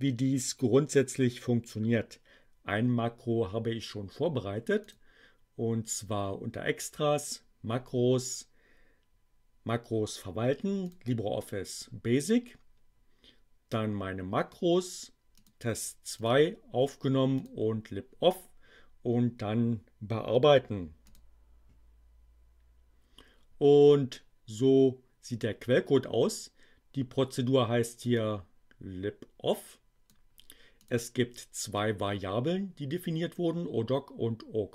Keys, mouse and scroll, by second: 4.8 click, 10.8 click, 15.4 click, 16.2 click, 17.3 click, 21.0 click, 28.1-30.2 drag, 30.8 click.